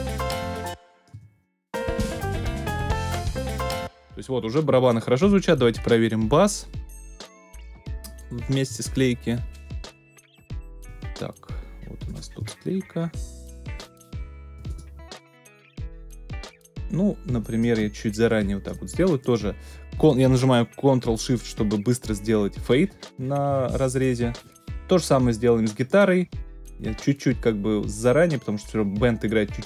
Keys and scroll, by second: 0.5 space, 3.5 space.